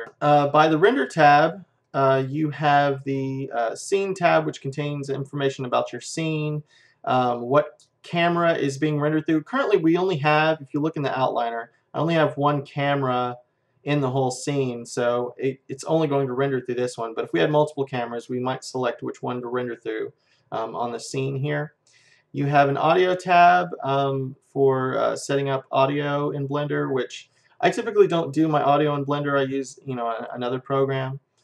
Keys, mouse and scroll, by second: 1.8-6.5 drag, 10.7-13.2 middle drag, 12.1-13.9 drag, 14.7-17.2 middle drag, 21.9-24.3 drag, 28.3-31.4 drag.